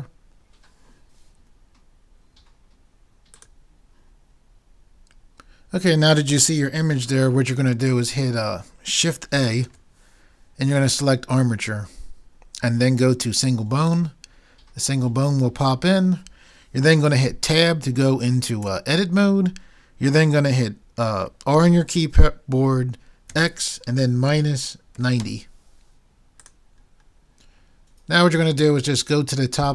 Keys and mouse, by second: 8.2-10.1 middle drag, 9.7 shift+a, 18.7 Tab, 21.6 r.